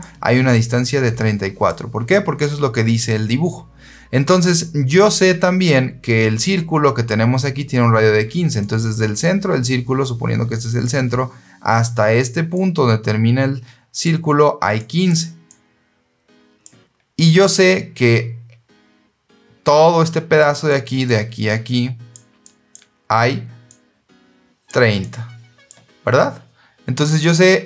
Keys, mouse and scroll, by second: 0.5-1.5 drag, 8.5-10.7 drag, 12.4-13.9 drag, 14.7 click, 15.4-16.5 drag, 20.3 click, 20.9-22.0 drag, 22.3 click, 23.6 click, 24.9 click.